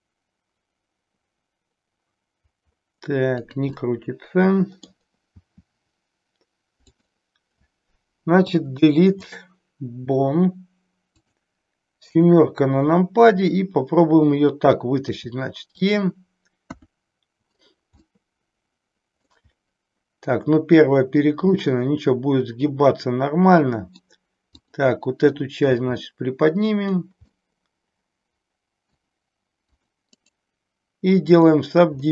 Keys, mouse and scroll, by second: 3.8-4.9 middle drag, 5.4 r, 8.4 Delete, 11.2 click, 12.2 KP_7, 15.0 e, 16.6 KP_1, 18.0-19.4 middle drag, 21.5-24.0 middle drag, 24.5 click, 25.7 g, 26.8 click, 27.3-28.9 middle drag, 29.7 click, 30.1-31.7 right drag, 32.0-32.1 middle drag.